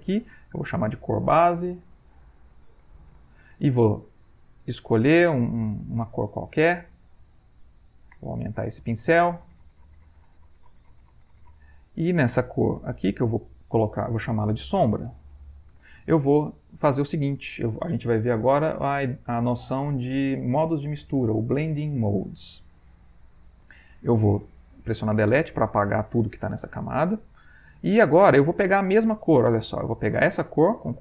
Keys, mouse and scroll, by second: 0.2 click, 0.5 click, 1.4-3.4 typing, 4.3 right click, 5.4-6.5 drag, 7.0 click, 7.4-12.0 shift+drag, 12.8 click, 13.3 click, 14.7-16.0 typing, 25.1 Delete, 27.1 click, 27.9 Escape.